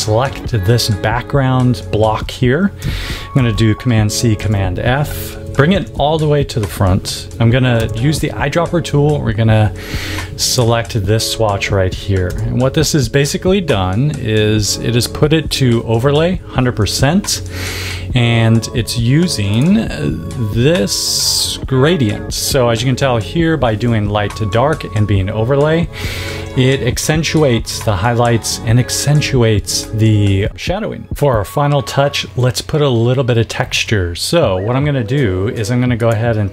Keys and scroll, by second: 3.2 super+c, 4.2 super+f, 5.6 shift+super+], 7.6 i, 12.1 v.